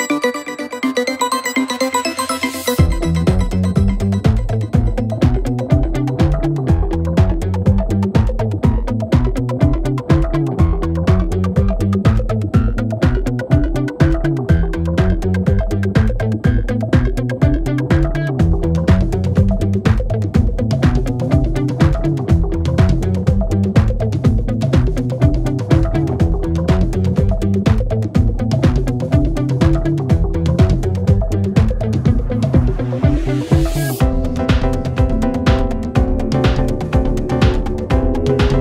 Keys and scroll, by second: 3.8 4, 5.9 3, 8.2 4, 9.2 ctrl+z, 13.0 3, 14.2 ], 14.9 ctrl+z, 28.1 ., 29.3 ctrl+z, 29.7 ,, 31.5 ..